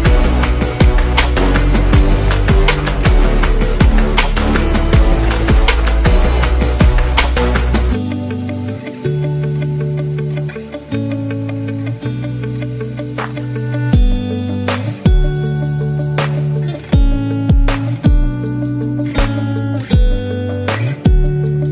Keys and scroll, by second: 0.2-1.3 typing, 3.3 m, 6.3 v, 8.8-9.9 typing, 13.5 BackSpace, 13.6 BackSpace, 14.9 2, 15.8 5, 17.7-18.7 typing, 18.9 Return, 21.5 z.